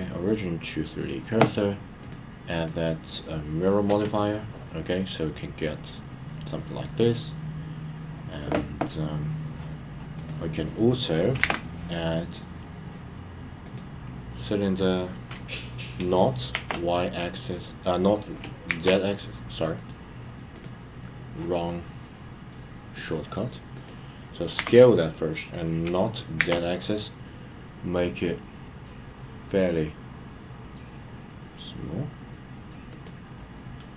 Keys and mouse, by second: 0.0 right click, 2.0-3.9 drag, 5.1-6.9 middle drag, 10.2 click, 19.9-20.5 shift+right drag, 23.0 click, 23.7 click, 32.9 click.